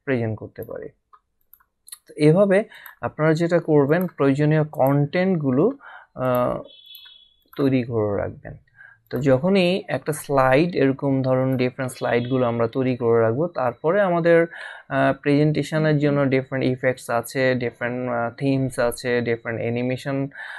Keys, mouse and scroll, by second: 6.2 click, 9.1 click, 11.4 click.